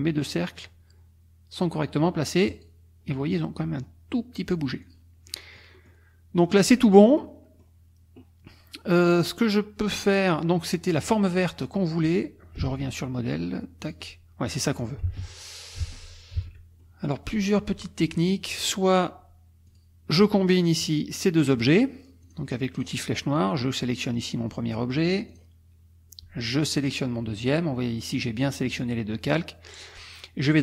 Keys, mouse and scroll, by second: 2.5 click, 4.8 click, 5.3 middle click, 6.5 middle click, 7.0 click, 12.7 alt+Tab, 13.8 alt+click, 14.6 click, 15.1 alt+Tab, 15.9 alt+Tab, 16.8 alt+click, 18.5 click, 19.7 click, 20.7 shift+click, 22.2 click, 22.7 click, 23.8 click, 25.3 click, 26.8 shift+click.